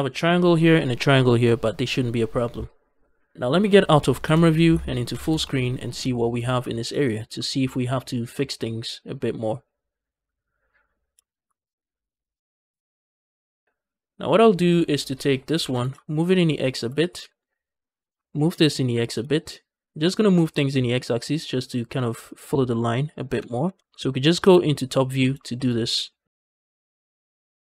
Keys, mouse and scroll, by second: 4.1 KP_0, 5.0 ctrl+space, 5.5 middle click, 6.0 shift+middle click, 6.3 scroll down 2, 6.6 shift+middle click, 6.9 middle click, 7.3 shift+middle click, 7.6 middle click, 8.3 shift+middle click, 8.6 scroll up 2, 8.8-10.8 middle drag, 10.8 scroll down 1, 11.1 shift+middle click, 11.4-12.5 middle drag, 12.7 shift+middle click, 13.0-13.4 scroll up 2, 13.4 middle click, 13.6 scroll up 1, 13.8-15.0 middle drag, 15.0 click, 15.4 g, 15.6 x, 16.5 shift+click, 16.9 click, 17.1 g, 17.3 x, 17.7 shift+right click, 18.0 g, 18.2 x, 18.9 shift+click, 19.2 shift+middle click, 19.4 scroll up 1, 20.0 click, 20.2 g, 20.4 x, 22.1 shift+click, 22.5 shift+middle click, 22.9 click, 23.2 g, 23.4 x, 23.8 click, 24.3 KP_7, 25.0-25.3 scroll down 2, 25.3 shift+middle click, 25.6 scroll up 2, 25.9 shift+middle click, 26.3 scroll down 2, 26.3 shift+middle click, 26.4 scroll up 1, 26.5 click, 26.6-27.6 typing, 26.7 shift+click, 26.8 shift+middle click, 26.9 click, 27.1 shift+click, 27.2 shift+middle click, 27.2 scroll down 1, 27.3 shift+middle click, 27.4 scroll up 1, 27.5 click.